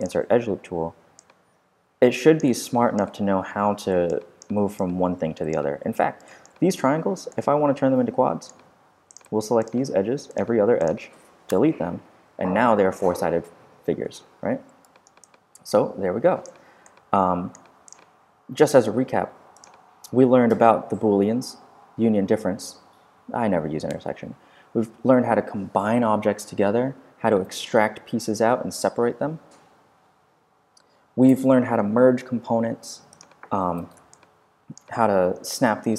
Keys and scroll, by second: 5.7 super+z, 7.0 super+q, 7.5 q, 11.5 shift+BackSpace, 12.2 BackSpace.